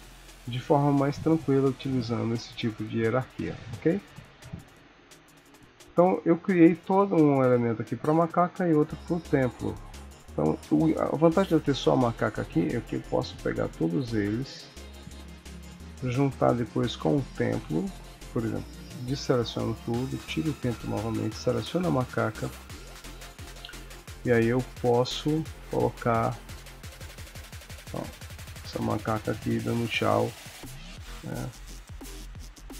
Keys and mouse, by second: 0.2 ctrl+middle click, 0.6 ctrl+s, 1.0 middle click, 2.6 KP_1, 4.3 ctrl+s, 7.1 click, 8.3 click, 9.8 click, 10.1 click, 11.3 click, 12.8 s, 14.2 g, 16.5 click, 17.9 click, 20.2 click, 20.9 click, 22.9 s, 24.7 click, 25.8 s, 27.0 g, 29.4 middle click, 30.4 KP_3, 31.5 g.